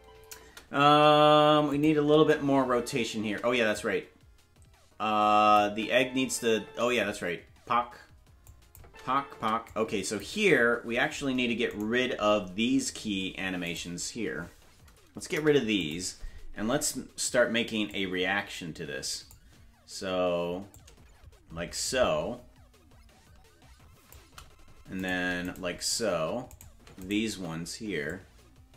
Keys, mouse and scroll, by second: 1.1 space, 1.7 click, 1.9 space, 3.5 space, 3.7-5.6 drag, 5.6 space, 6.7 space, 8.5 click, 8.8 space, 9.7 click, 9.7 space, 11.8 shift+right click, 13.7 right click, 15.3 Delete, 17.9-19.3 drag, 20.7-24.1 drag, 25.5 shift+right click, 26.6 right click, 27.1 shift+right click, 28.1-28.7 drag.